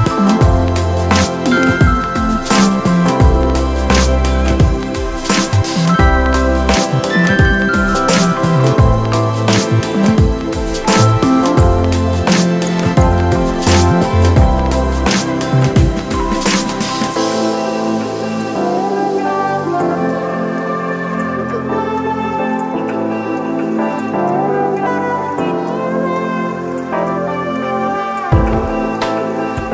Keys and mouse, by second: 3.5 click, 7.1 click, 8.4 Right, 9.6 click.